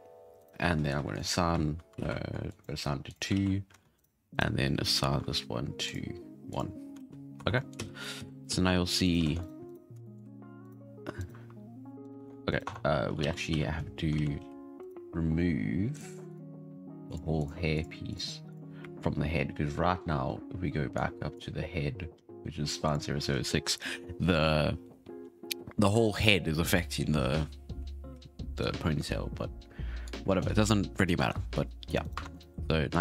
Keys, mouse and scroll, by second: 0.3 alt+shift+right click, 1.1 click, 1.9 ctrl+z, 2.5 click, 3.0-3.3 drag, 3.3 alt+a, 3.9 alt+shift+right click, 4.3 alt+shift+right click, 4.8 alt+shift+right click, 5.8 click, 6.5 click, 6.9 alt+a, 7.1 scroll down 3, 7.3 Tab, 7.5 middle drag, 7.8 z, 8.0 middle click, 8.1 z, 8.5 z, 9.0 right click, 9.2 ctrl+Tab, 9.4 right drag, 9.6 right drag, 10.0 shift+middle drag, 10.1 scroll down 1, 10.2 r, 11.2 right click, 11.3 r, 12.1 ctrl+Tab, 12.5 right click, 12.6 Tab, 13.2 alt+a, 13.9 scroll down 1, 14.1 alt+a, 14.4 c, 15.9-16.3 drag, 17.0-17.4 drag, 17.7-18.1 drag, 18.5-19.1 drag, 19.1-20.9 scroll up 9, 20.9-21.6 drag, 21.6-22.8 scroll down 5, 22.8 click, 30.0-31.2 drag, 31.2 Tab, 32.0 right click, 32.2 ctrl+Tab, 32.3 right click, 32.5 r.